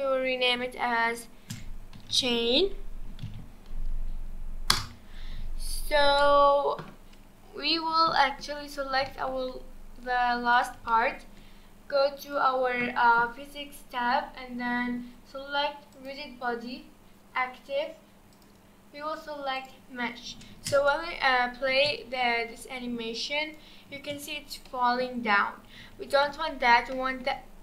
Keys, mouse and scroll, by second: 8.2-8.6 shift+middle drag, 8.6-9.1 scroll up 2, 9.1-9.7 shift+middle drag, 9.7-10.0 scroll up 4, 10.5 click, 10.9-12.2 shift+middle drag, 12.2 click, 15.9-20.1 drag, 20.1-20.5 scroll down 2, 20.5 space, 21.9 space, 23.4 click, 23.9 space, 24.2-24.7 scroll down 2, 24.7-25.8 middle drag, 25.8 space, 26.1 click, 26.9-27.6 shift+middle drag.